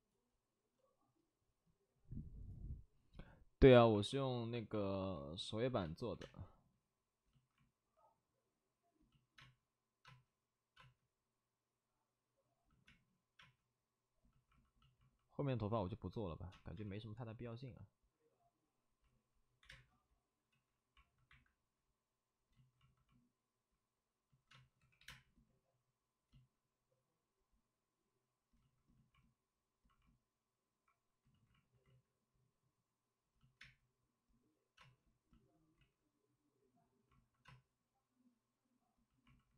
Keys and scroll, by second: 5.8 space, 6.1 3, 6.1 space, 9.3 space, 10.0 space, 13.3 space, 16.4 5, 16.4 space, 16.7 5, 19.1-20.1 typing, 20.5 ctrl+z, 21.2 1, 24.5 space, 24.7 3, 25.0 space, 25.0 3, 31.2 ctrl+z, 31.8 ctrl+z, 34.7 space, 37.4 space.